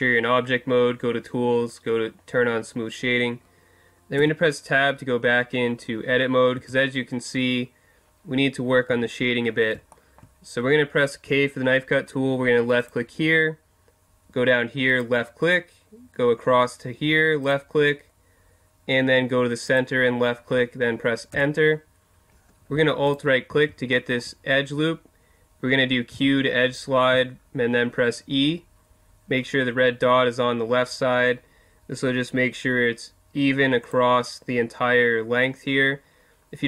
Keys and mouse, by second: 0.8-1.2 middle drag, 4.2 Tab, 6.6 Tab, 8.9 Tab, 9.9 middle click, 11.2 k, 23.1 right click, 24.6-27.1 middle drag, 26.1 q.